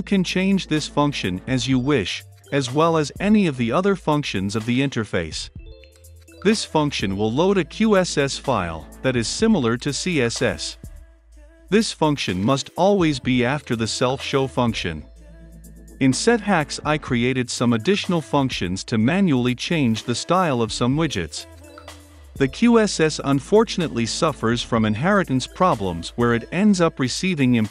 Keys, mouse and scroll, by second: 2.8-19.8 drag, 20.6 click, 21.2 middle click, 21.8-25.0 drag, 26.5-27.7 drag.